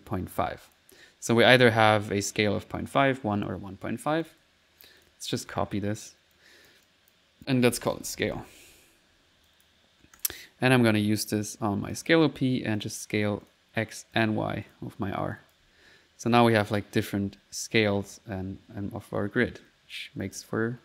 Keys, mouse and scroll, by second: 4.3 click, 5.0 ctrl+click, 5.2-6.1 typing, 5.5 ctrl+click, 6.4-7.4 ctrl+drag, 8.9 ctrl+s, 9.2 ctrl+middle click, 9.5 ctrl+click, 10.2 ctrl+click, 10.9-12.1 drag, 12.4 click, 12.8 click, 13.5-15.0 drag, 15.4 click, 15.7-20.8 typing.